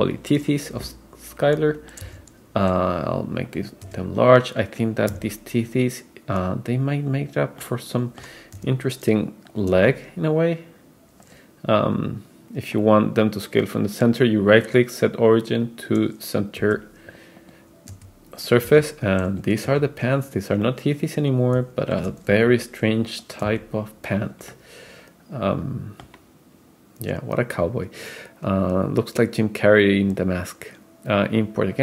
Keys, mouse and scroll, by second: 2.1 s, 3.9 r, 7.6-11.5 middle drag, 8.6 g, 9.7 s, 12.8-16.1 right drag, 16.6 g, 18.0 r, 18.7 s, 19.7 r, 20.7-22.1 middle drag, 22.3 g, 23.5 s, 24.5-26.2 middle drag, 28.6-31.8 drag.